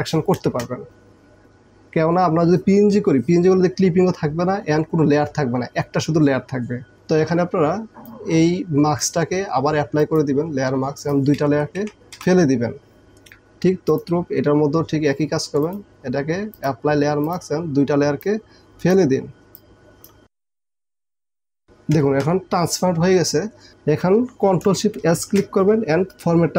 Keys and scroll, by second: 0.4 Return, 11.9 Delete, 12.2 Delete, 21.5 Delete, 22.0 ctrl+KP_0, 25.2 ctrl+shift+s.